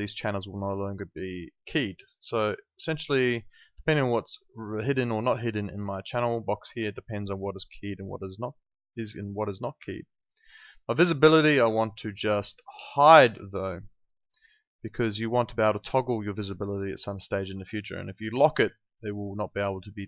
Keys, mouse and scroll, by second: 10.9 click, 11.5 right click, 13.7 click.